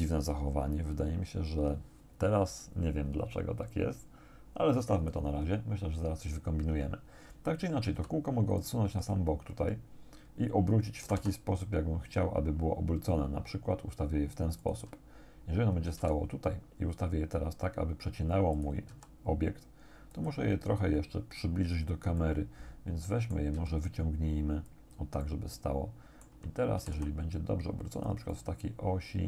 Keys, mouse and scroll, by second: 4.8 click, 8.0 g, 8.6 click, 11.1 r, 14.7 click, 16.0 g, 18.6 click, 18.9 s, 20.1 click, 22.2-23.5 drag, 23.6 g, 24.7 click, 25.3 middle click, 25.3-26.5 drag, 26.8 r, 28.0 click, 28.3-29.2 drag.